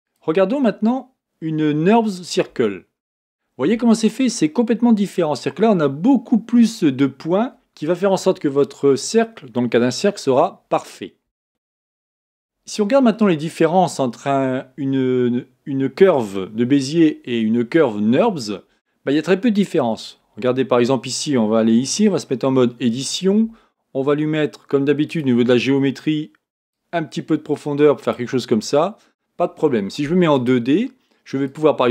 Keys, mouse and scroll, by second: 0.0 click, 2.5 Tab, 21.8 Tab, 25.1 click, 26.7-30.4 drag, 31.4-31.9 drag.